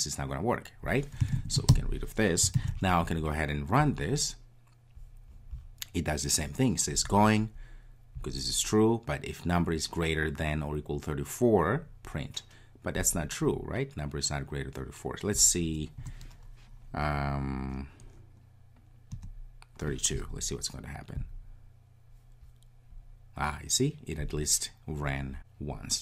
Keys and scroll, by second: 2.7 super+s, 3.8 ctrl+r, 21.2 ctrl+r.